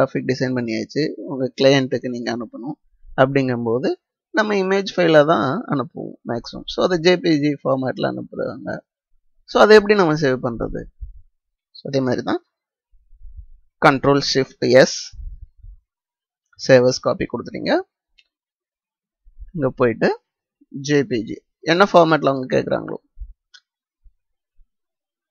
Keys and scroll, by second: 14.6 ctrl+shift+s.